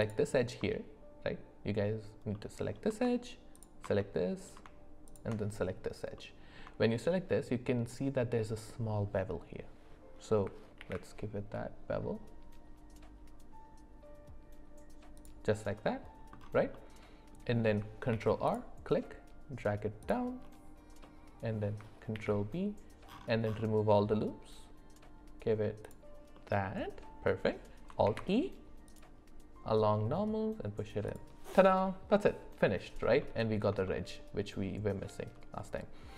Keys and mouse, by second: 0.0 alt+click, 2.3 middle click, 4.0 middle click, 6.1 middle click, 6.8 shift+middle click, 10.8 ctrl+b, 16.7 middle click, 18.1 ctrl+r, 21.0 middle click, 22.1 ctrl+b, 26.3 middle click, 28.0 alt+e, 33.2 middle click, 33.8-35.2 shift+middle drag.